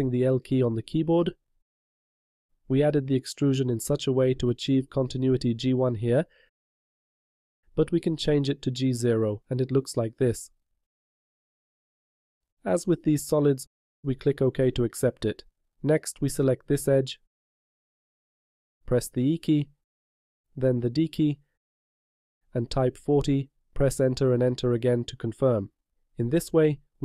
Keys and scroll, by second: 19.3 e, 21.5 d.